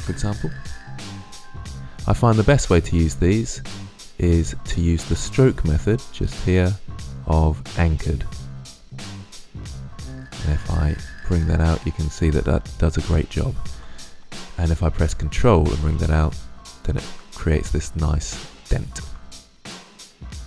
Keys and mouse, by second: 0.0 Return, 4.0 drag, 4.6-6.0 middle drag, 6.0-9.0 drag, 10.3-12.1 drag, 13.5 ctrl+z, 15.1 drag, 20.1-20.4 drag.